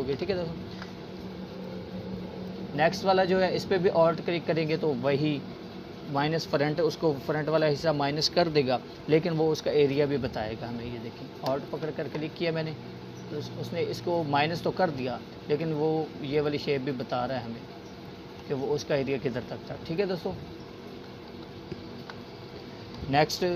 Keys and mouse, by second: 2.3-3.5 drag, 12.2-19.0 alt+drag, 22.0 ctrl+z.